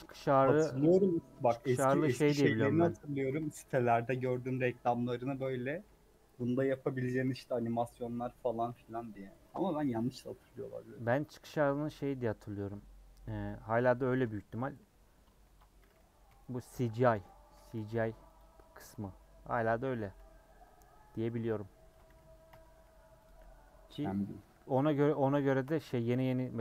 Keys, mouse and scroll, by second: 0.3 3, 2.7 click, 3.4 Tab, 3.6 3, 4.2 middle click, 5.2 KP_Add, 5.8 ;, 6.3 middle click, 6.7-7.4 scroll up 1, 8.4 middle click, 8.6 3, 8.9 click, 9.8-11.4 middle drag, 11.4 a, 12.4 u, 14.1 alt+Left, 15.4 ctrl+z, 16.2 ;, 17.4 a, 18.3 u, 19.5 /, 20.1 Tab, 22.5 h, 23.2 click, 23.4 middle click, 23.6-24.4 scroll up 1, 24.4 KP_Decimal, 25.1-25.4 scroll up 3, 25.4 shift+middle click, 25.7 Tab.